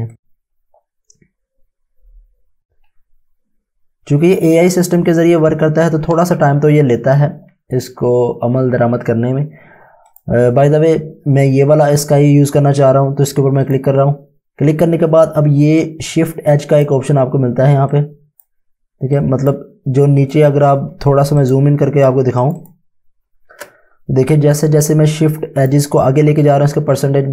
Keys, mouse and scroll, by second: 0.1 click, 8.0-8.3 scroll up 1, 10.1 click, 13.6 click, 21.0 space, 21.5 click, 21.6 space, 22.4 click, 24.9 click.